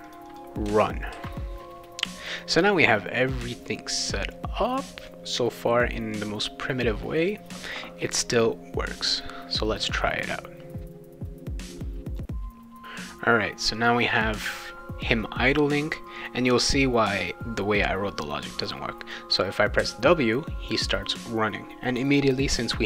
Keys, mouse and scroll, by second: 0.1 click, 0.3 click, 1.1 ctrl+s, 9.0 click, 12.8-13.9 drag, 19.8 w.